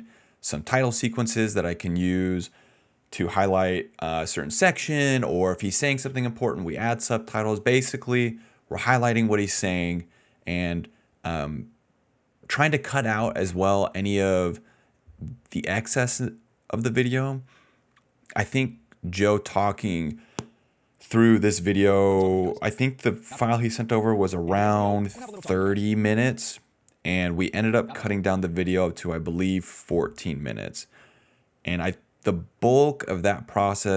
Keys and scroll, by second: 2.6 a, 3.0 BackSpace, 5.6 d, 22.0-24.3 typing, 26.0 space, 27.8 space, 28.3 space.